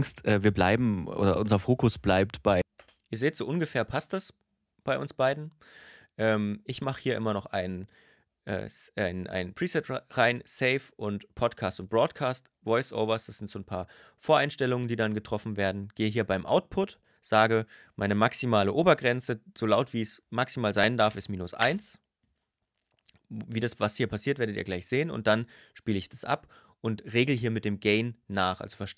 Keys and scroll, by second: 2.4 space, 20.4-21.2 typing.